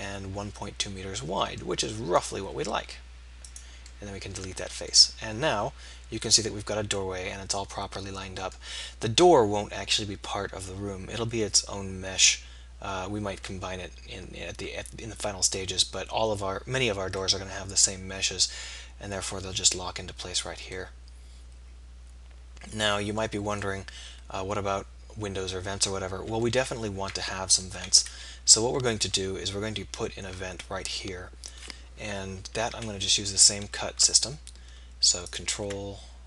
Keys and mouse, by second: 2.2 click, 2.6 x, 4.5 z, 17.2 middle click, 22.2 middle click, 23.7-25.7 middle drag, 28.1 KP_1, 32.8 k.